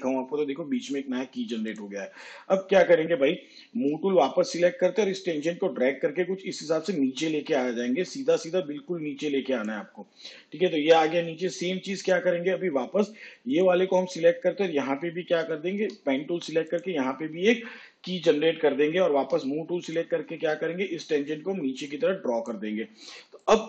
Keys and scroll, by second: 5.0 v, 16.9 g, 20.3 v.